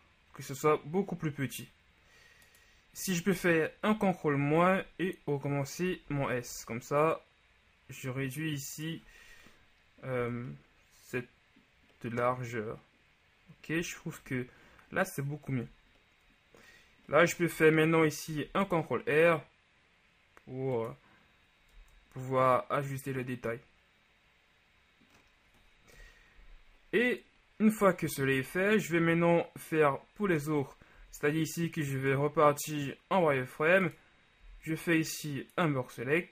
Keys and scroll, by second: 3.9 ctrl+KP_Subtract, 6.1 s, 10.3 Tab, 15.6 Tab, 18.4 ctrl+r, 21.9 Tab, 26.1 KP_1, 30.3 Tab, 31.1 z, 34.5 b.